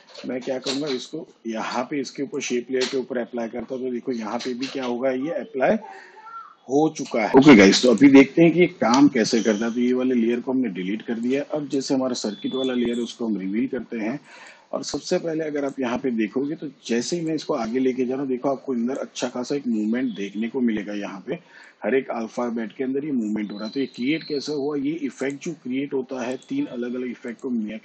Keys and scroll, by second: 8.7 Delete.